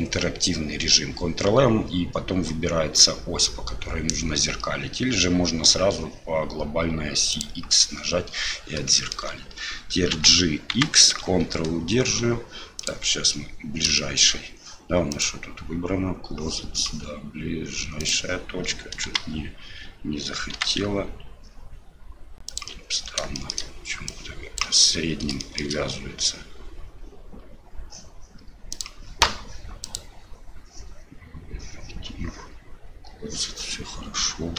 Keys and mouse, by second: 9.0 shift+click, 14.0 shift+click, 15.2-18.1 drag, 19.1 g, 23.4 shift+middle click, 24.2 click, 25.4 shift+middle click, 28.7-33.3 drag.